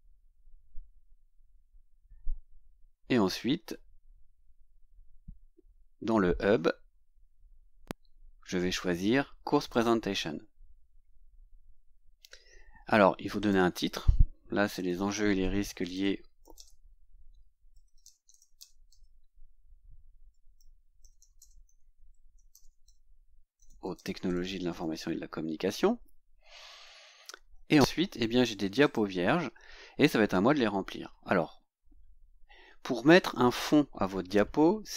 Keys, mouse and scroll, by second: 3.7-4.4 scroll down 4, 9.7 click, 13.4 click, 14.5-25.3 typing, 26.0 scroll down 2, 26.6 scroll down 2, 28.8 click, 31.4-31.8 scroll down 2.